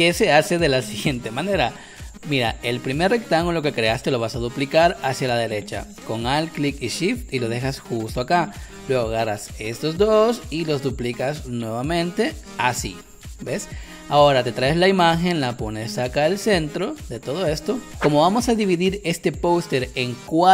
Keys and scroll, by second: 8.7 space, 13.6 space, 17.9 space.